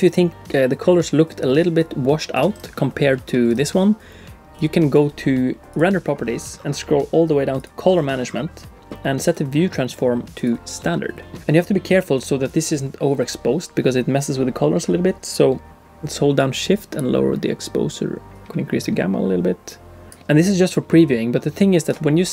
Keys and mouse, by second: 5.7 click, 9.2-10.5 drag, 16.5-20.1 drag.